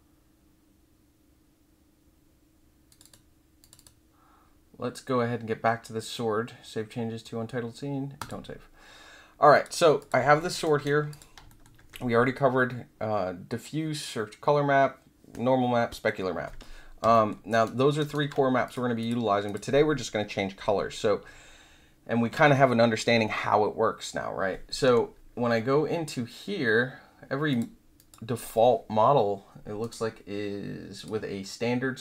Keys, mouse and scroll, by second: 2.8 click, 3.0 click, 3.6 click, 3.7 click, 8.1 click, 9.5 click, 9.9 click, 10.3 alt+middle click, 10.6 alt+click, 11.1 click, 17.1 alt+middle click, 17.5 alt+click, 17.9 alt+click, 18.6 click, 19.0 click, 19.4 click, 27.5 click, 27.9 click, 29.8 right click, 30.9 click.